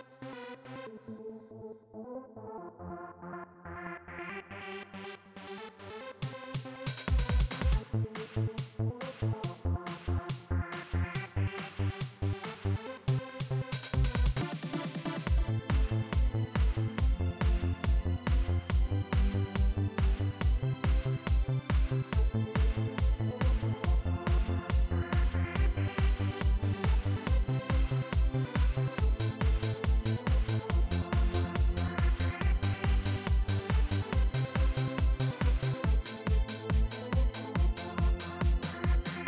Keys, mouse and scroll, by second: 1.0 ctrl+x, 2.9 click, 3.9-6.2 typing, 7.1 click, 8.4 click, 9.1 Return, 11.9 ctrl+v, 14.1 click, 25.0-26.7 drag.